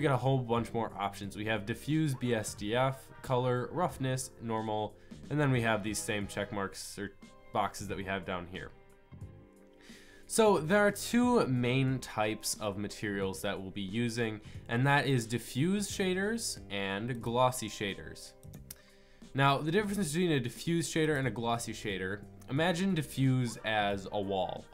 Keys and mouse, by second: 2.6-15.1 middle drag, 16.8-18.4 middle drag, 20.1-24.7 drag.